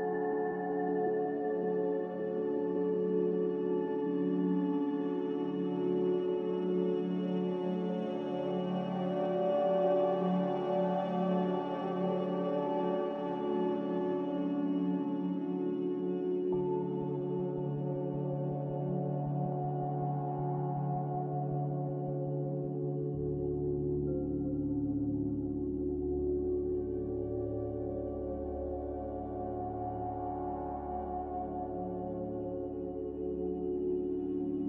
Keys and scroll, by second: 0.8 a, 4.4-7.3 typing, 16.2 1, 19.7-22.1 typing, 23.6-24.6 typing, 27.1-28.1 typing, 30.8-31.8 typing.